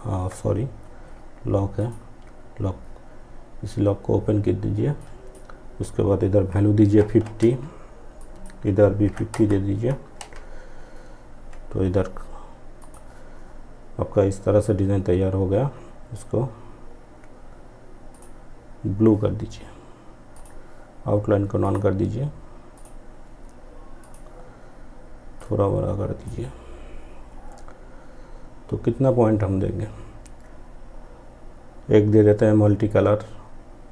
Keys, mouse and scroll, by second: 0.8 click, 4.0-6.8 drag, 7.2 click, 9.2 Return, 11.8 click, 17.2 click, 19.4-27.6 drag.